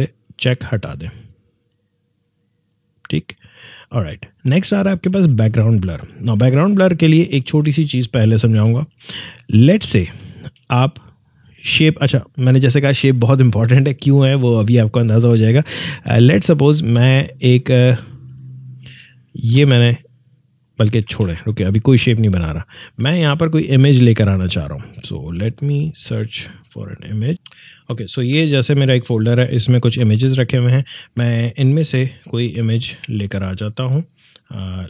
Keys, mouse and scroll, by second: 6.9 click, 8.2 Delete, 8.4 click, 8.5 Delete, 10.3 alt+scroll down 1, 10.8 space, 10.9 click, 11.3 space, 16.3-21.0 drag, 21.0 ctrl+z, 22.5 click, 26.3-31.2 drag, 31.2-32.3 scroll up 1, 33.8 scroll down 1.